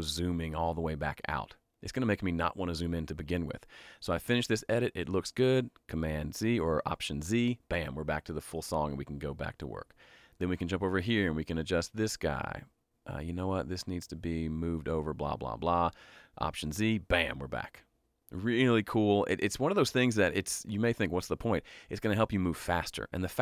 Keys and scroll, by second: 6.1 alt+z, 16.6 alt+z.